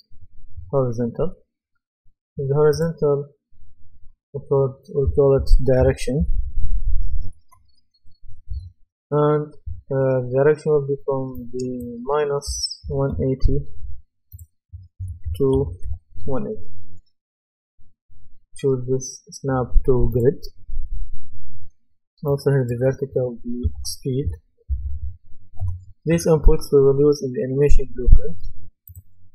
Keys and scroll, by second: 5.1-8.0 typing, 8.5 Return, 12.8 KP_1, 13.8 Return, 15.0 KP_1, 15.2 KP_8, 15.8 Return, 23.5-25.5 typing, 25.6 Return.